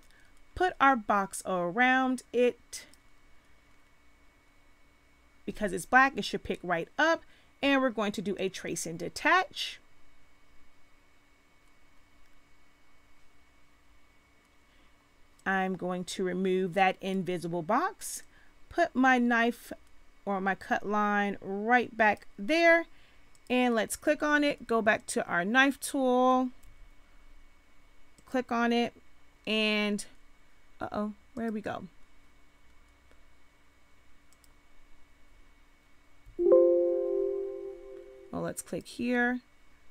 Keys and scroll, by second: 26.6 v, 36.2 v.